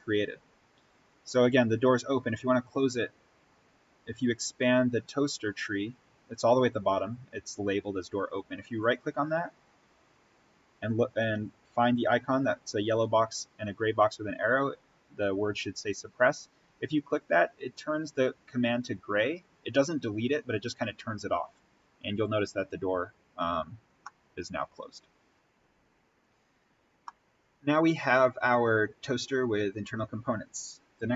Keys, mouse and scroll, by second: 1.9-2.3 scroll down 1, 3.0 scroll up 1, 5.4-6.3 scroll down 1, 8.5 right click, 17.0 click, 23.8 scroll up 1, 24.0-25.4 middle drag, 25.4 click, 26.9-31.1 middle drag.